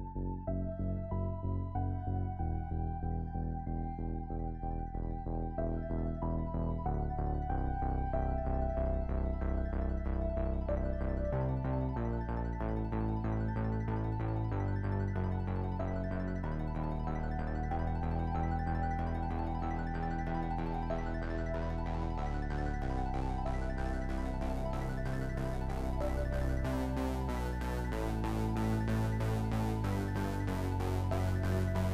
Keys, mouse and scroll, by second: 2.1 i, 3.6 i, 5.0-10.5 drag, 13.1 i, 14.1-16.1 shift+middle drag, 16.1-18.1 drag, 18.1-21.6 middle drag, 21.6-23.1 drag, 23.1-27.0 middle drag, 28.6-29.0 scroll up 1, 29.0-31.8 shift+middle drag, 31.8 scroll down 2.